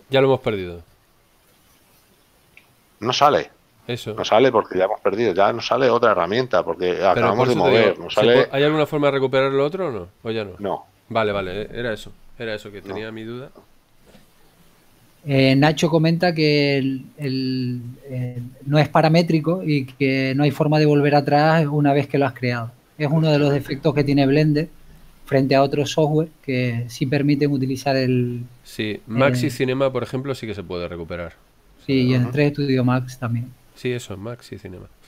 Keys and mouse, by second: 2.0 F6, 2.8 F6, 17.5 ctrl+z, 25.7 KP_7, 30.1 click, 34.5 click.